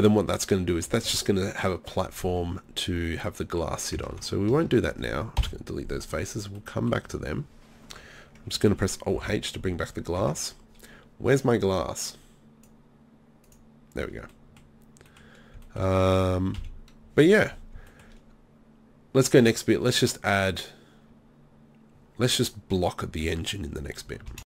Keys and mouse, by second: 4.1 ctrl+z, 5.4 Delete, 9.2 alt+h, 10.2 Tab, 12.1 middle click, 14.3 middle drag, 16.6 KP_3.